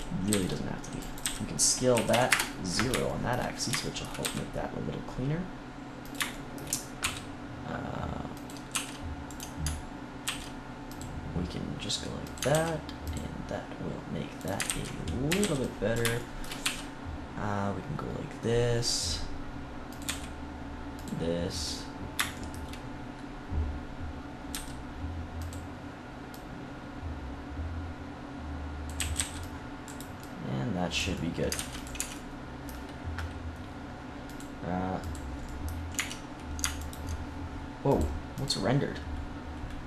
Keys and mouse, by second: 0.0-1.1 typing, 4.1 e, 6.2-7.6 drag, 6.9 e, 8.6 r, 10.2 ctrl+r, 11.0 click, 12.4 ctrl+r, 12.4-14.3 drag, 14.6 ctrl+z, 15.2 a, 15.3 c, 16.1 click, 16.6 e, 20.0-21.7 drag, 20.0 e, 22.4 click, 22.7 middle click, 24.5 s, 25.4-27.8 drag, 28.9 a, 29.1 c, 29.8-31.1 drag, 31.1 middle click, 31.5 ctrl+s, 31.9 Tab, 35.4 click, 35.9 Tab, 36.7-37.8 drag.